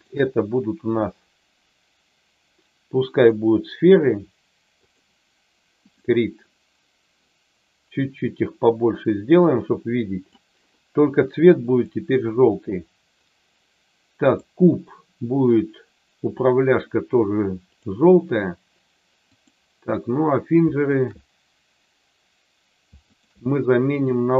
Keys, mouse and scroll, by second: 3.3-5.0 drag, 5.9 click, 8.4-10.4 drag, 11.7 click, 14.3 click, 17.6 click, 20.9 shift+click, 23.1 shift+click, 24.0-24.3 drag.